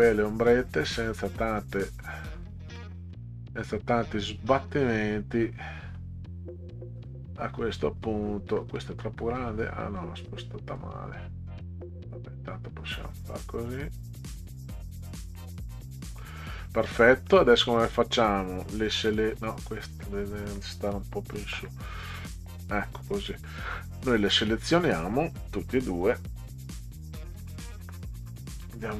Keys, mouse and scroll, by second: 2.8 middle click, 3.0 scroll down 2, 3.6-5.1 drag, 7.0 click, 8.8 middle click, 10.0 click, 11.6-15.2 drag, 17.8-19.4 drag, 19.9 click, 21.6 Up, 24.2-25.3 drag.